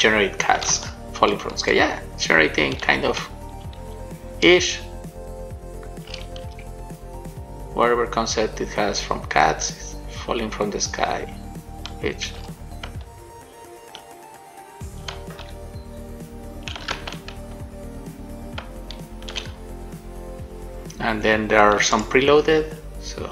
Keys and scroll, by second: 0.8-4.7 typing, 5.8 Right, 6.2 Up, 6.8 shift+space, 12.7 shift+w, 15.2 a, 17.2 shift+a.